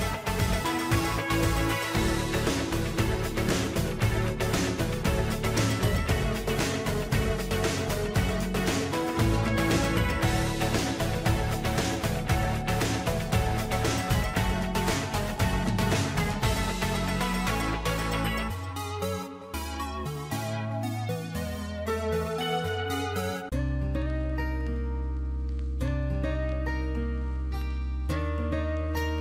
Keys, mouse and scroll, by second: 27.7 right click.